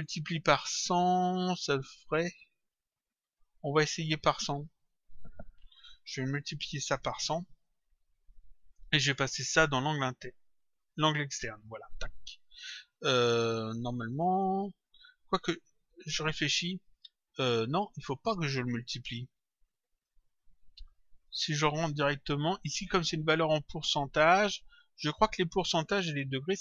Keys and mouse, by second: 6.1 click, 7.5 click, 10.1 click, 17.7 click, 19.9 click, 22.4 click, 25.0 click, 26.2 click.